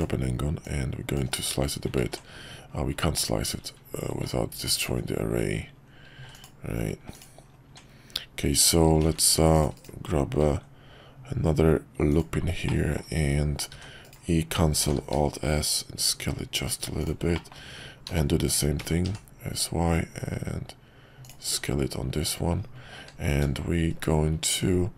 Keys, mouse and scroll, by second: 2.0 ctrl+z, 4.9 ctrl+z, 6.2 x, 7.7 Tab, 9.0 ctrl+r, 10.4 ctrl+b, 12.6 middle click, 14.8 alt+s, 17.4 middle click, 21.4 Tab, 23.0 q.